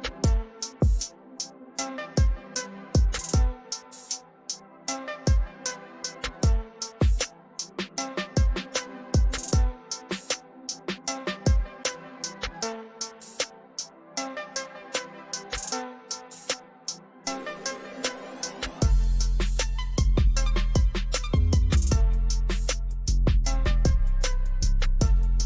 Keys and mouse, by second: 6.7 click, 10.9 click, 15.4 click, 20.5-22.2 typing, 24.7 right click.